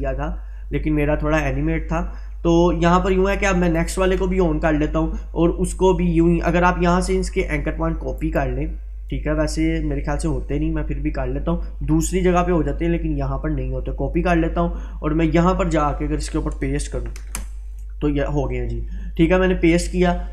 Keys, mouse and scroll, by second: 0.2-2.0 scroll up 1, 3.8 click, 6.5-7.1 drag, 8.2 right click, 14.2 click, 17.2 ctrl+v, 19.2-20.3 drag.